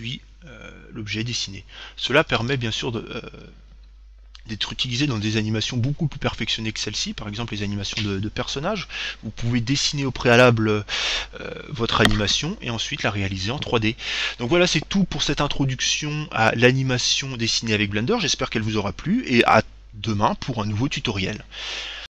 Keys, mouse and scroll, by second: 2.6 alt+a.